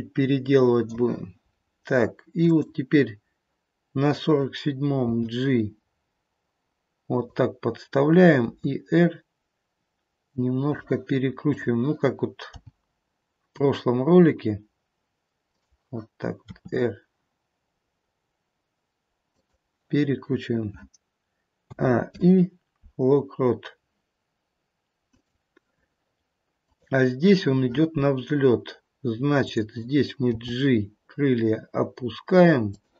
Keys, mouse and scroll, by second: 1.5-2.3 scroll up 1, 2.3 click, 2.3-4.5 scroll up 2, 5.0 g, 8.5 r, 11.5 click, 12.5 g, 16.4 r, 21.6 a, 22.0 i, 26.7 click, 29.4 click, 30.4 g.